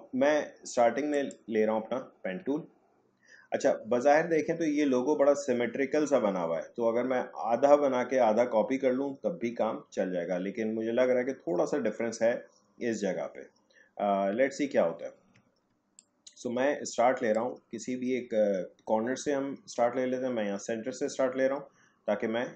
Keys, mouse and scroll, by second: 1.1 click, 2.9-3.8 alt+scroll up 1, 3.8-4.3 alt+scroll down 1, 14.6-15.7 alt+scroll up 2, 15.7 space, 16.0 click, 16.2 space.